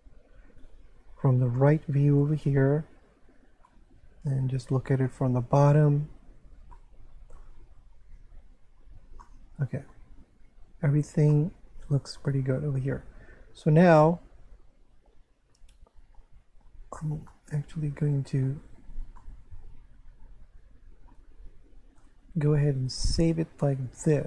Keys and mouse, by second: 0.6 3, 1.6 shift+middle click, 3.7 middle click, 6.7 middle click, 9.2 middle click, 11.3 shift+middle click, 17.3 shift+middle click, 19.2 shift+middle click, 23.1 click.